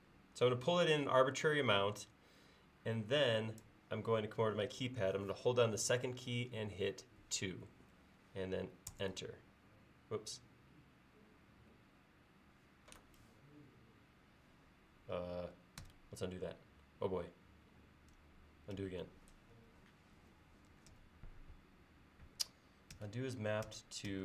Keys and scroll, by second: 7.3 2, 9.0 Return, 15.9 alt+BackSpace, 18.8 alt+BackSpace, 19.6 alt+BackSpace, 23.1 alt+BackSpace.